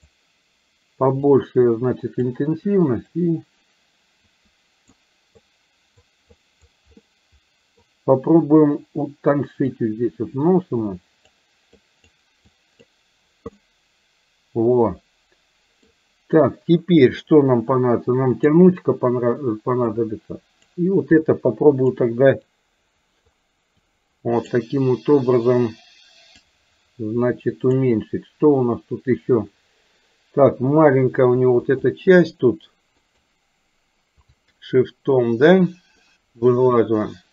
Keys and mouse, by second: 1.4 click, 3.2-4.9 drag, 5.6 click, 6.3 click, 7.1 middle click, 9.7-11.4 drag, 11.8 click, 12.6 click, 13.6-15.9 middle drag, 18.3 click, 19.9 click, 21.3 click, 22.6 click, 23.8 click, 26.4-27.8 drag, 31.8 shift+click, 33.1 click, 34.4 shift+click, 36.1-37.3 middle drag.